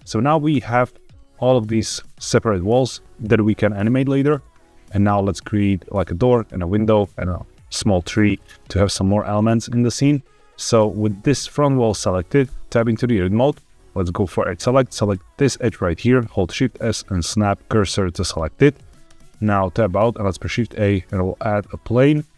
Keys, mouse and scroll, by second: 0.4 Tab, 0.7 click, 1.3 click, 1.8 click, 4.6-5.8 scroll down 1, 12.4 Tab, 14.2 click, 14.9 click, 16.2 shift+s, 19.0 Tab, 20.0 shift+a.